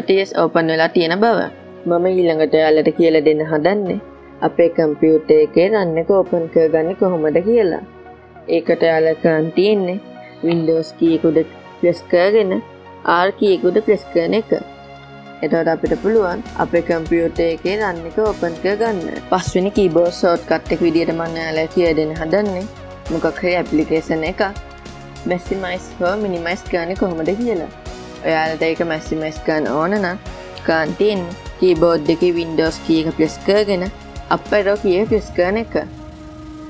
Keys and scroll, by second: 14.4 super+r, 35.9 super+Up.